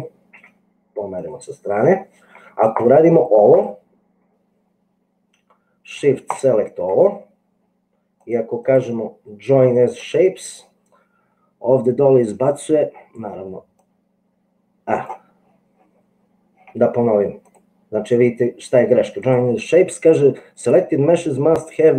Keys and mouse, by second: 0.4 g, 2.8 click, 8.3 click, 8.8-10.1 drag, 17.5-19.4 drag.